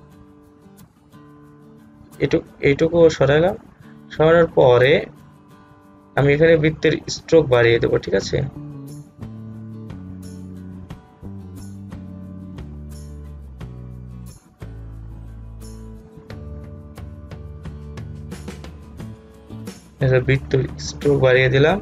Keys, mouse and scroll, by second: 16.1 click.